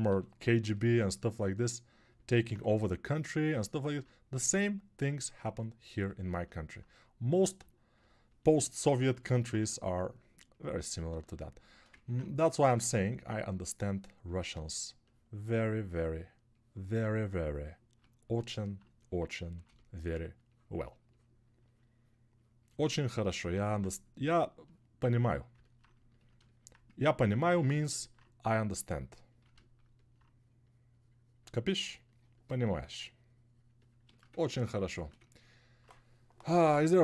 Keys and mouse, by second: 1.9 ctrl+alt+click, 1.9 ctrl+alt+middle click, 1.9 ctrl+alt+right click, 11.2 alt+1.